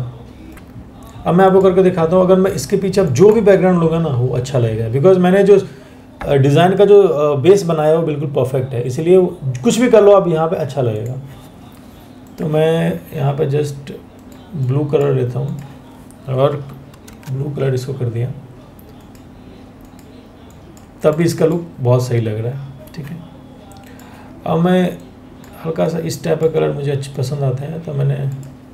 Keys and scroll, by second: 0.5 ctrl+z, 16.7 ctrl+BackSpace.